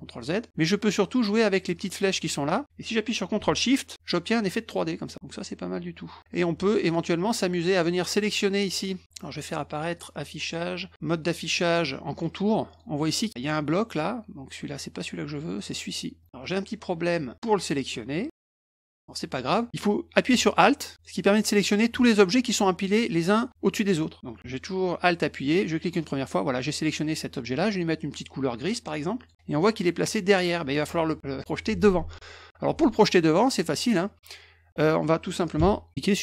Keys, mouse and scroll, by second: 1.7-6.2 drag, 6.8 click, 7.8 click, 8.7 click, 9.9 click, 12.1 click, 12.7 click, 13.3 click, 15.6 click, 16.2 click, 16.4 click, 19.5 click, 20.9 alt+click, 25.4 alt+click, 29.2 click.